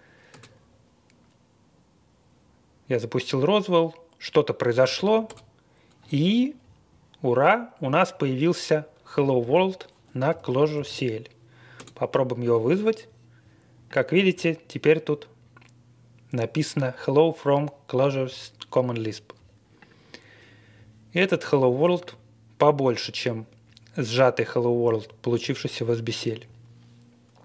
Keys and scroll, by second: 0.3 Return, 4.8 typing, 5.2 Return, 9.4 super+c, 10.3 typing, 10.7 super+v, 11.8 Return.